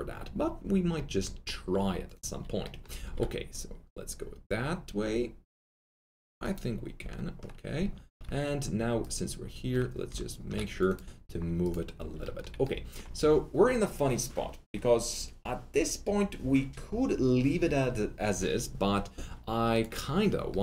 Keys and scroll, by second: 3.0 alt+1.